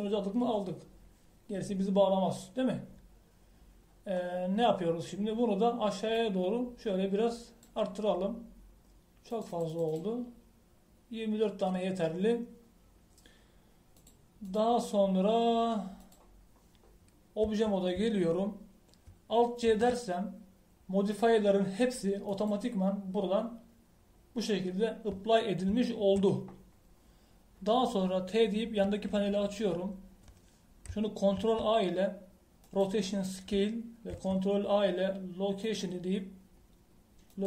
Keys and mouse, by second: 5.2 middle click, 7.1-9.0 drag, 10.3-13.8 drag, 14.9-18.4 drag, 18.4 Tab, 21.6 alt+c, 26.8 middle click, 29.8 t.